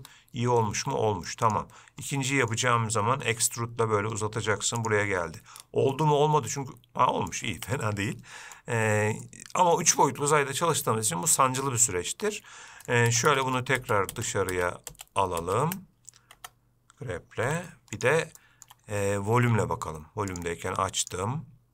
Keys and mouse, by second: 1.1 g, 2.4 middle click, 3.5 e, 6.2-7.6 middle drag, 7.9 shift+middle click, 9.5 middle click, 13.4-16.0 ctrl+z, 16.6 Tab, 17.7 g, 18.7 shift+middle drag, 20.6 click, 21.3-21.7 drag.